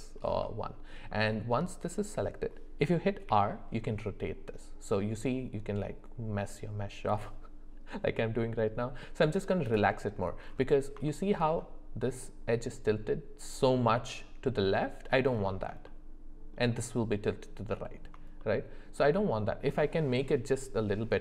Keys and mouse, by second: 0.6 shift+middle click, 3.3 r, 11.1 shift+middle click, 15.9 shift+middle click, 18.4 shift+middle click.